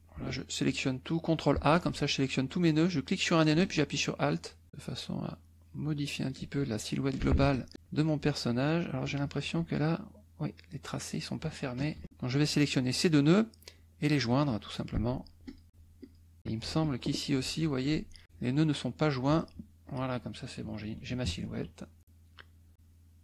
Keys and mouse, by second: 1.5 ctrl+a, 2.9-4.5 drag, 4.7-6.5 alt+drag, 7.4 ctrl+alt+a, 9.0 click, 10.6 click, 11.7 KP_Add, 12.3 click, 14.3 click, 15.5 click, 16.0 click, 16.7 z, 16.8 click, 17.5 F2, 17.8 click, 18.2 click, 19.8 click, 20.7 KP_Subtract, 22.7 click.